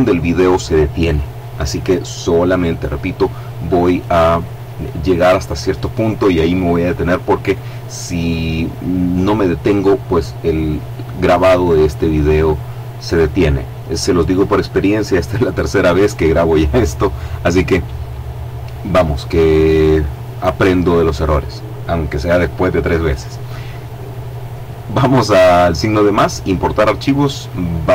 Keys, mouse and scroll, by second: 26.7 click.